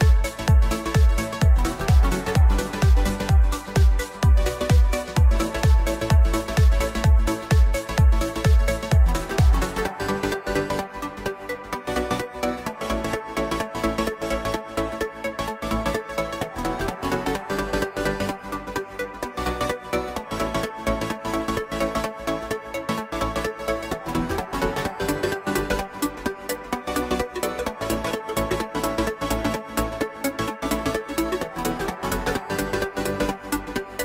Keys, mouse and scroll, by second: 1.7 Tab, 3.0-3.9 middle drag, 3.9 z, 7.0 click, 7.3-8.6 scroll down 4, 8.6 KP_7, 9.3-11.1 scroll down 1, 11.1 s, 12.9 click, 14.0 KP_1, 14.5-15.1 scroll up 4, 15.1 click, 15.8-18.3 drag, 18.3 r, 20.6 KP_7, 21.8-22.6 scroll down 5, 22.6-23.7 shift+middle drag, 23.7 g, 26.2-27.3 scroll up 1, 27.3 click, 28.1-28.5 scroll down 4, 28.5-29.0 shift+middle drag, 29.0-30.6 scroll up 4, 30.6-33.3 drag.